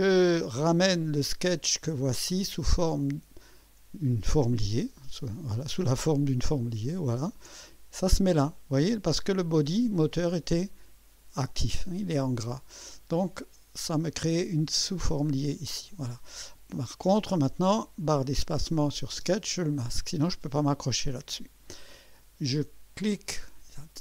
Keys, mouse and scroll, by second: 1.5 click, 6.7 ctrl+click, 19.2 space, 23.0 click.